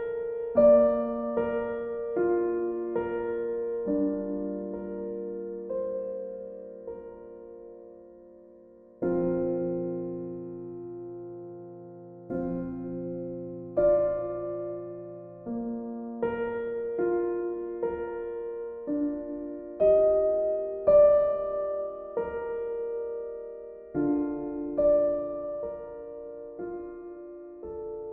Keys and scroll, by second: 4.3 b, 11.5 ctrl+z, 24.5 e.